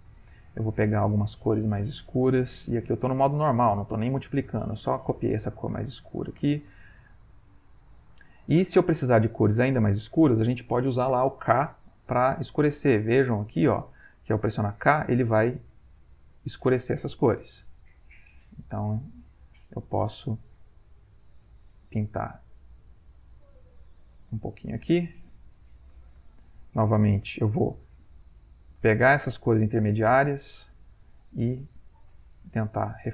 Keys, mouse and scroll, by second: 2.0-14.1 shift+drag, 19.3-27.8 drag, 27.8-33.1 ctrl+middle drag.